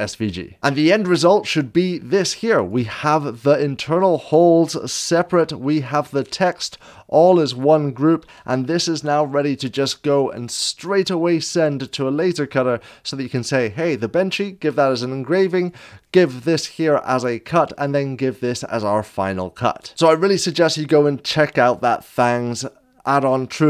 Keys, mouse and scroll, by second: 2.5-6.2 drag, 5.1 ctrl+z, 5.1 7, 8.2 ctrl+z, 15.7 ctrl+z, 15.8 click, 17.8 click.